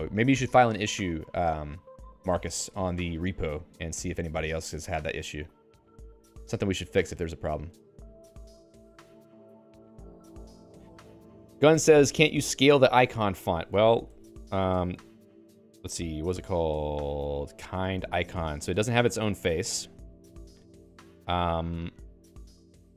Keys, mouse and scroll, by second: 14.1 alt+x, 15.0 Return, 17.3-18.6 typing, 19.0 ctrl+g, 19.9 ctrl+g, 22.6 alt+x.